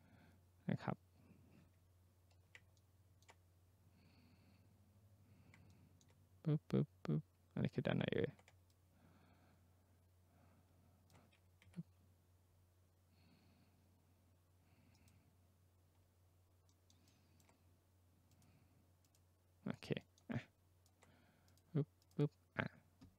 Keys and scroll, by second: 11.6 Escape.